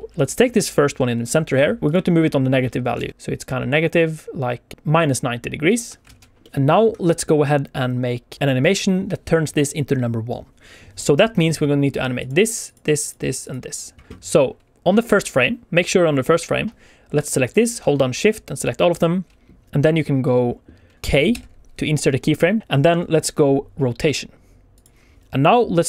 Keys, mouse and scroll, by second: 1.8 Escape, 1.8 click, 1.8 r, 1.8 x, 2.9 alt+a, 3.1 click, 3.1 r, 3.1 x, 5.6 ctrl+click, 6.0 alt+a, 6.1 alt+shift+z, 6.1 middle click, 12.1 click, 12.6 click, 13.0 click, 13.3 click, 17.4 click, 18.1 shift+click, 18.5 shift+click, 18.8 shift+click, 21.2 k.